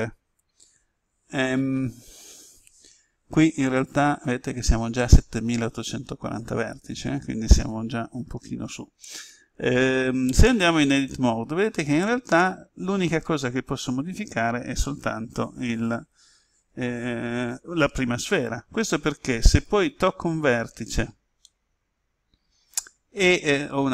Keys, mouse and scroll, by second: 6.3-6.9 scroll up 1, 10.4 Tab, 12.4-18.9 middle drag, 19.6 right click, 21.4 middle click.